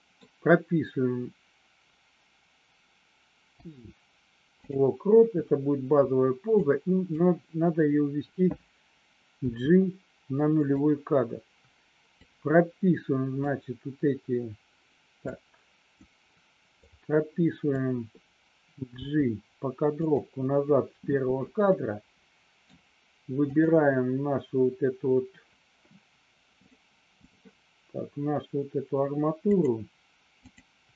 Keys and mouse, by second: 3.5 i, 6.6 click, 9.3 g, 12.2-13.5 drag, 15.2 click, 16.9 click, 18.9 g, 20.0 click, 21.7 middle click, 23.5 click, 26.6 click, 29.6 click, 30.3 click.